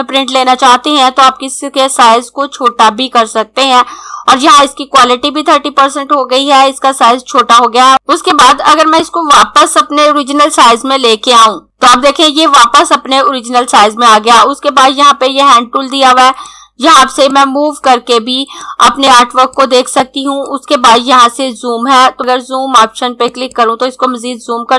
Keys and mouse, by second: 8.3 click, 11.6 click, 16.4 click.